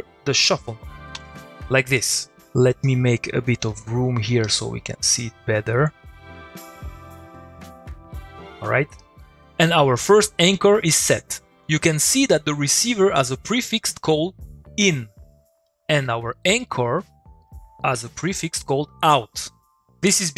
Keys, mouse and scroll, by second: 2.8-3.4 click, 4.4 middle click, 5.2 click, 9.4 middle click, 15.6 middle click, 15.7 click, 15.9 middle click, 17.5 click, 17.8 middle click, 18.2 click, 18.4 middle click.